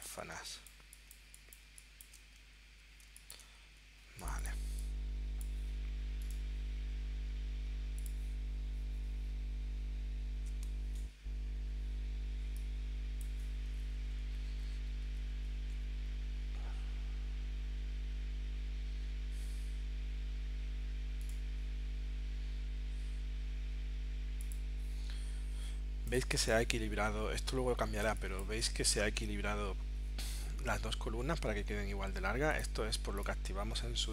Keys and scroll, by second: 0.3 space, 3.0 space.